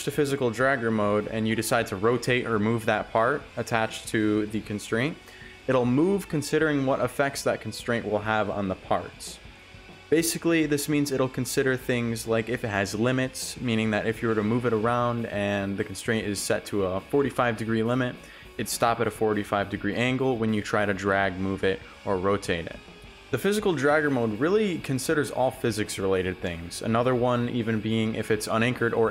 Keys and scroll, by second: 4.0 Return, 7.1 s, 7.5 ctrl+z, 10.0 w, 23.9 w, 25.2 s, 26.3 ctrl+z, 27.5-29.1 typing.